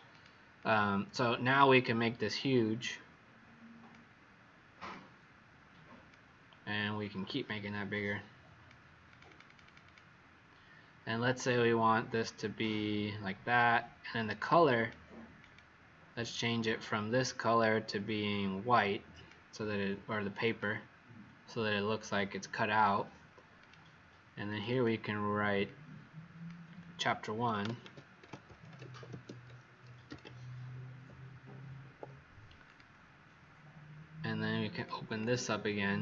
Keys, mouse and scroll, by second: 0.0 click, 0.5 click, 1.6 click, 9.2 click, 9.4 click, 9.6 click, 9.8 click, 14.6 click, 24.6 click, 25.6 click, 27.4-30.4 typing, 31.7 Escape, 32.6 click, 35.0 click.